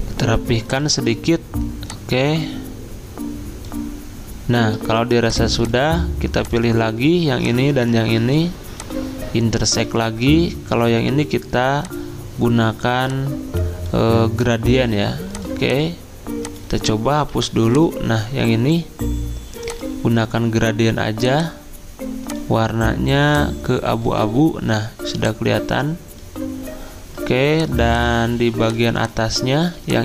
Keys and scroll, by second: 17.3 Delete, 29.7 z.